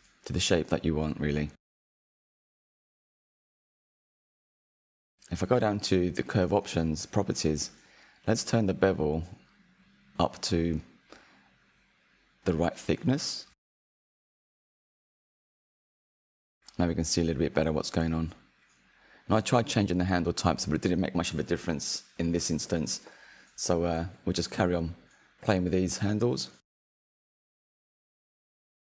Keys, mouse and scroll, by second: 1.2 click, 3.5-5.3 drag, 5.3 scroll down 2, 5.9 click, 6.3-7.4 scroll down 7, 7.7-11.5 drag, 16.3 Tab, 17.1 click, 17.7 click, 18.6-21.8 right drag, 21.8 r, 26.3 s.